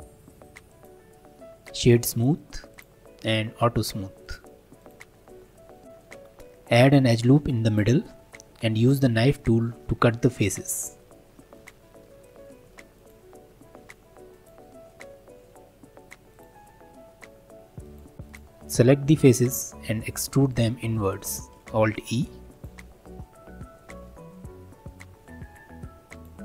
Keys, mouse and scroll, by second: 2.7 click, 3.3-3.7 scroll down 4, 4.2 click, 4.8 click, 5.1-5.9 middle drag, 5.9 click, 7.7-9.4 drag, 9.4-11.5 shift+middle drag, 11.5-14.7 drag, 18.2 scroll up 3, 18.3 click, 19.6 3, 20.0 shift+click, 20.5 shift+click, 20.9 middle click, 21.7 alt+e.